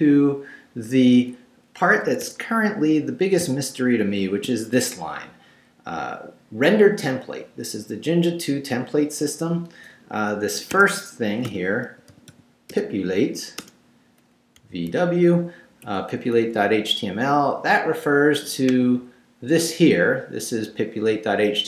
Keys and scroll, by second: 2.1 Escape, 2.7 Down, 3.4 shift+Down, 4.1 shift+v, 10.6 Escape, 11.2-12.8 typing, 13.6 shift+Return, 14.6 v, 14.9 w, 15.8 Right.